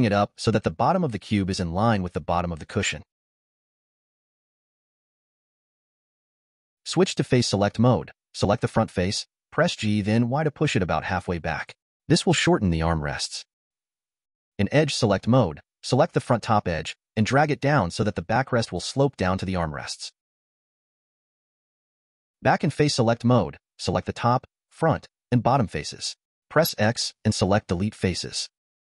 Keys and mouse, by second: 0.1 click, 1.1 g, 5.3-6.7 middle drag, 11.0 g, 14.4 click, 15.6 click, 16.8 g, 19.8-22.2 middle drag, 23.7 click, 25.0 shift+click, 25.6 shift+click, 26.1 click, 27.6 x, 28.7 typing.